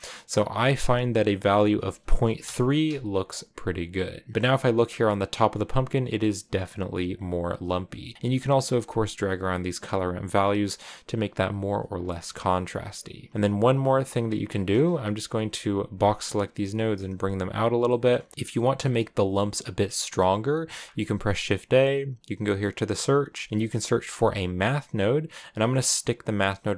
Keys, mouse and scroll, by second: 2.3 click, 3.2-7.3 middle drag, 7.3-9.4 drag, 9.6-11.5 drag, 12.0 scroll down 1, 12.0 middle click, 12.9-14.0 drag, 14.9-25.1 right drag.